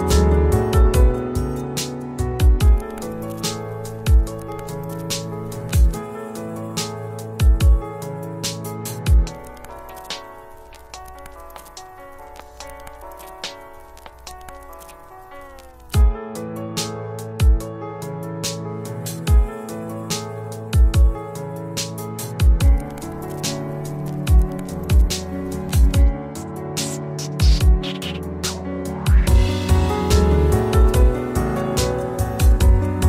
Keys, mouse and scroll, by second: 5.2-10.6 drag, 22.3 click, 23.6-23.9 scroll up 1, 25.6 click, 29.3 click, 31.5-33.0 drag.